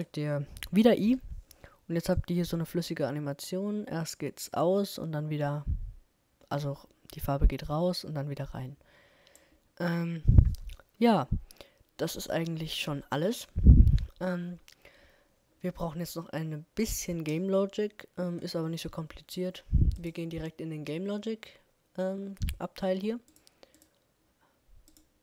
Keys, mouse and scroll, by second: 1.0 i, 2.2-4.0 drag, 16.2-20.0 middle drag, 20.0-21.9 drag.